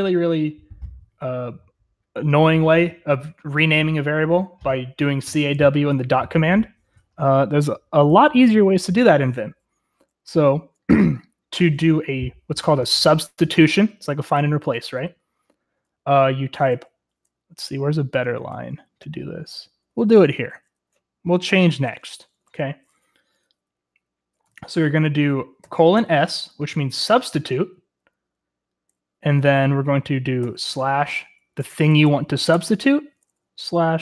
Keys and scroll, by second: 13.8-14.9 typing, 18.5-21.0 typing, 22.1 h, 25.6-26.0 typing, 31.3-33.0 typing.